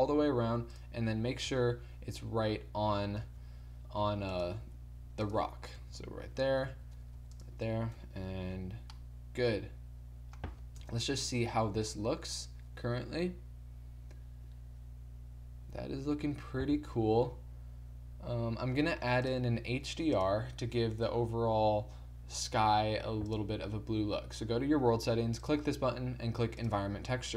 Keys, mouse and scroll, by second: 1.4 KP_3, 3.2 KP_1, 4.0 g, 4.6 r, 5.7-8.5 typing, 10.7 KP_0, 11.8 shift+z, 19.3-21.8 drag, 22.6 z.